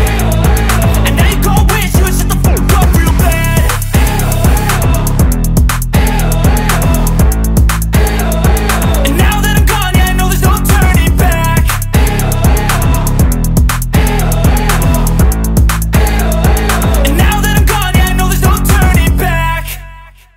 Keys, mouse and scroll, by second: 0.4 alt+scroll up 1, 0.5-1.8 drag, 2.6-3.5 click, 3.6 ctrl+d, 3.9 scroll down 2, 4.7-5.1 alt+scroll down 1, 6.7 alt+scroll up 1, 6.9-8.7 drag, 8.8 ctrl+d, 9.3-10.1 alt+scroll down 1, 10.1-10.4 scroll down 2, 10.6 space, 10.7-12.3 click, 11.1 space, 12.3 space, 12.4-13.3 alt+scroll up 2, 13.4-14.2 alt+scroll up 2, 14.2-14.7 alt+scroll up 1, 14.7 alt+scroll down 1, 15.1-16.9 alt+drag, 17.1-17.7 alt+scroll up 2, 17.7 space, 17.8 click, 18.2 space, 18.5 click, 18.7 space, 19.2-19.5 alt+scroll up 2, 20.2-20.3 click.